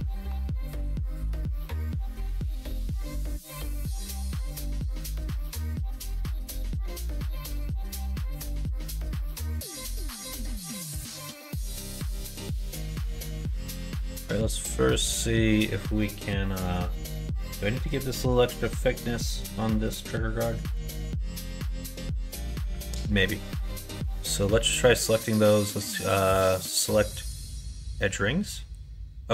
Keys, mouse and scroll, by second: 2.9 3, 3.3 alt+click, 3.9 x, 10.3 2, 11.6 2, 12.7 alt+click, 14.7-17.5 drag, 18.3 right click, 25.2-27.3 drag.